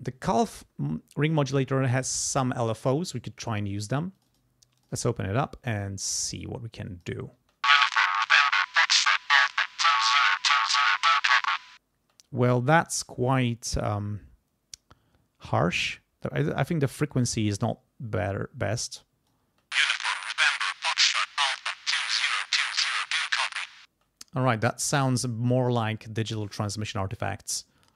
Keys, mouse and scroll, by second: 4.2 click, 4.8 click, 5.8-7.2 drag, 7.4 space, 12.0 space, 18.7 click, 19.4 space, 23.9 space, 27.5 click, 27.9 space.